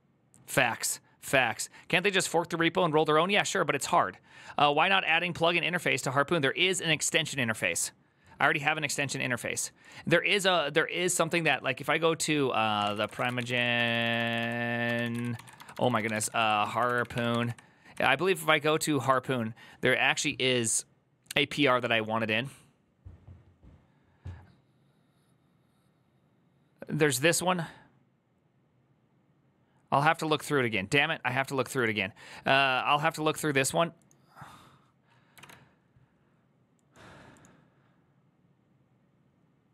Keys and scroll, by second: 11.2 ctrl+t, 12.3-18.6 typing, 35.2 alt+f.